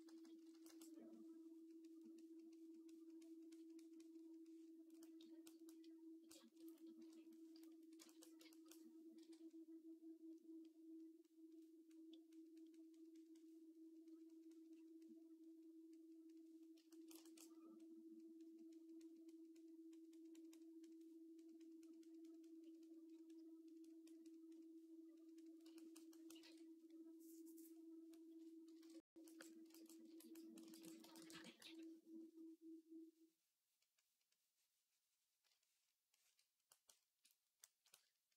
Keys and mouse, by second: 0.0-0.5 typing, 5.1-6.8 drag, 6.8 KP_3, 9.0 j, 26.2 ctrl+Tab, 28.6 ctrl+Tab, 29.1 shift+middle click, 29.6 ctrl+middle click, 30.1 click, 31.4 v.